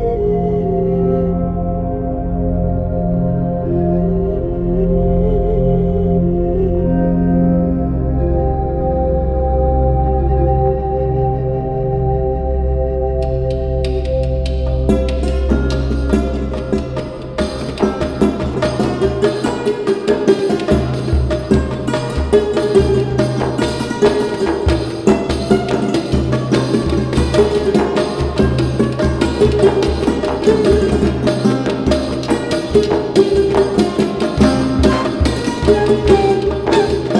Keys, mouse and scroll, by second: 0.7 ctrl+scroll up 1, 1.3-2.3 typing, 4.0 click, 6.4 typing, 9.9 click, 9.9 typing, 12.3 typing, 12.6-27.3 drag, 32.4-37.1 ctrl+alt+drag.